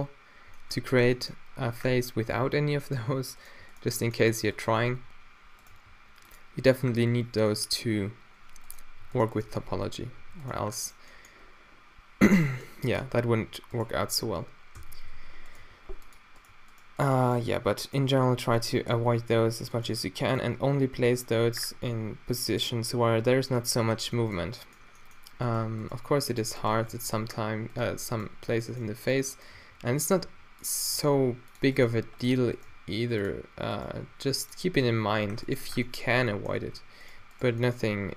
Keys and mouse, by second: 3.4-4.9 middle drag, 4.9 q, 5.8 g, 9.1 g, 9.6 q, 10.2 g, 10.7-12.4 drag, 14.8 f, 15.2 alt+w, 15.7 g, 19.1 f, 19.9 click, 19.9 g, 20.4-21.6 middle drag, 21.6 click, 25.5-30.2 drag, 26.9 f, 27.9 g, 29.6-32.7 typing, 30.2 middle click, 30.5-31.2 drag, 34.1 g, 35.1 g, 35.7 Tab, 36.7 Tab, 37.6 g.